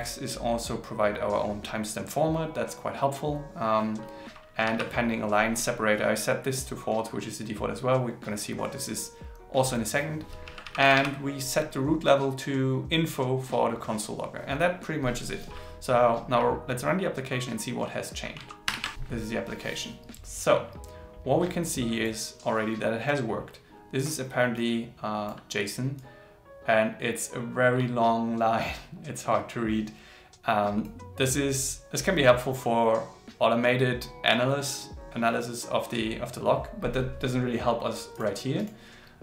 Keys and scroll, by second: 18.6 ctrl+shift+r.